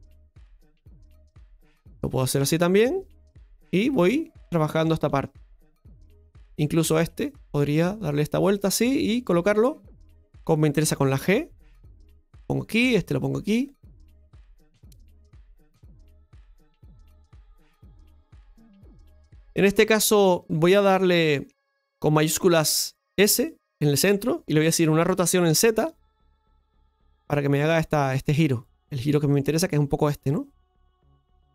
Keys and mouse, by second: 1.4-4.4 drag, 4.4-6.0 shift+middle drag, 6.0 right click, 7.3-8.6 drag, 9.1 right click, 12.7 right click, 14.0 right click, 14.0 g, 15.2 g, 15.7-17.1 middle drag, 17.5 right click, 19.8 right click, 20.3 right click, 20.8-23.8 middle drag, 23.1 shift+s, 30.8 middle click.